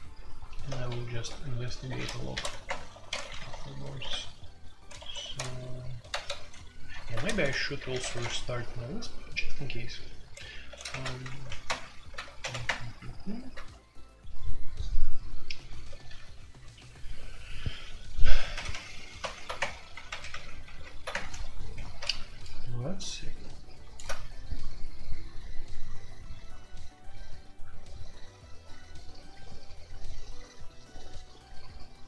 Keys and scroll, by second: 0.8 super+j, 1.2 super+j, 2.1-2.8 typing, 3.1 ctrl+d, 3.8 super+k, 4.9 Escape, 5.1 F2, 6.1 ctrl+c, 6.2 ctrl+c, 7.0 alt+2, 7.3-8.3 typing, 10.6 ctrl+c, 10.9 alt+o, 11.3 alt+p, 11.4-12.1 typing, 12.4 alt+p, 12.6 Return, 16.1 0, 18.5 alt+p, 18.7 alt+p, 19.2 alt+p, 19.5 Return, 20.0 alt+p, 20.3 alt+p, 21.1 Return.